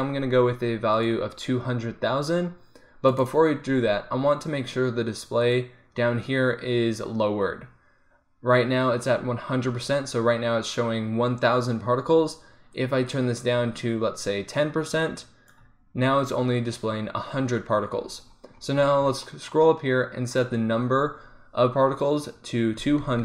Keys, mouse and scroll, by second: 1.0-4.5 drag, 4.5-5.5 middle drag, 5.5-9.8 drag, 12.8-15.1 drag, 20.4-23.2 drag.